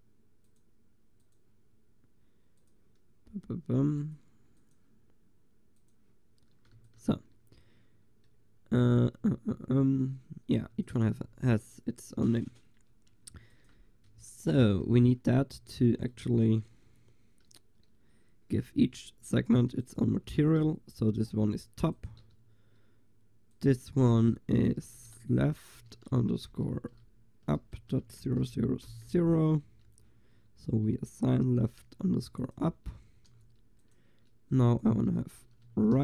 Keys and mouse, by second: 6.8 ctrl+s, 10.8 ctrl+s, 13.3 ctrl+s, 14.3-15.6 drag, 15.6 Tab, 16.5 a, 18.8 l, 19.9 click, 20.7 a, 22.2-28.0 drag, 28.5 0, 31.4 l, 32.5-36.0 drag, 33.4 a.